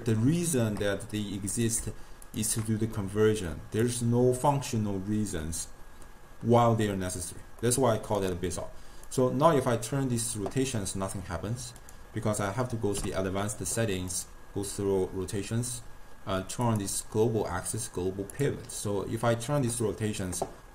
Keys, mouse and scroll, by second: 1.6 click, 2.3 shift+click, 3.1 click, 7.7-8.3 middle drag, 8.3 click, 9.2-11.9 drag, 13.0 u, 18.9-20.7 drag.